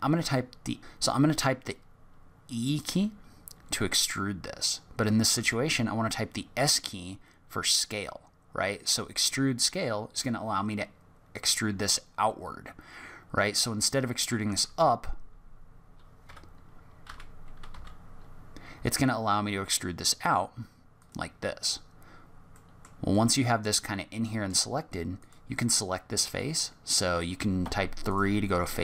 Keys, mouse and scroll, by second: 2.8 e, 17.0 e, 22.1-22.5 scroll up 3, 22.5 middle click, 23.1 middle click, 25.2 click, 26.2 click, 27.6 3, 28.0 click.